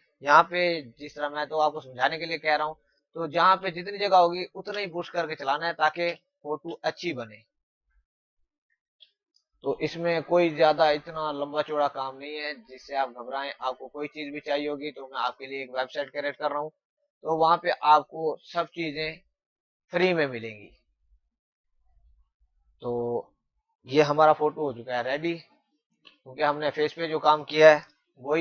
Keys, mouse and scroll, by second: 0.5 typing, 3.0 click, 3.8 space, 4.0 click, 4.3 space, 4.8 click, 5.4 space, 5.4 click, 5.8 space, 7.1 click, 8.3 space, 8.5 click, 8.8 space, 9.2 click, 10.2 space, 10.5 click, 10.7 space, 11.7 click, 14.4 space, 14.5 click, 14.9 space, 16.5 click, 19.2 space, 19.4 click, 19.8 space, 20.4 click, 21.3 space, 21.5 click, 21.8 space, 22.1 click, 24.2-24.7 typing, 26.6 typing, 28.2-28.4 typing.